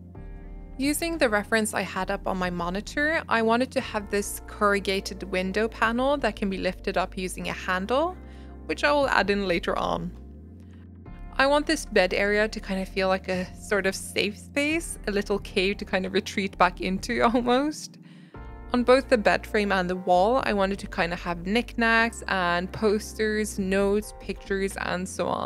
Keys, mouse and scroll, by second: 0.0 click, 1.4 click, 3.6-4.0 scroll up 4, 3.7 shift+middle click, 3.9 shift+middle click, 4.0 shift+middle click, 4.3 click, 6.7 click, 14.6 click, 14.8 scroll down 1, 14.8 shift+middle click, 15.0 a, 15.2 click, 15.5 ctrl+z, 15.9 shift+middle click, 16.1 click, 16.3 scroll down 2, 16.4 shift+middle click, 16.7 alt+z, 16.8 click, 17.0 g, 17.8 s, 18.3 s, 18.6 click, 18.8 g, 19.5 shift+middle click, 19.8 click, 20.7 alt+z, 20.8 alt+z, 21.1 click, 23.6 click, 24.3 shift+middle click, 24.5 click.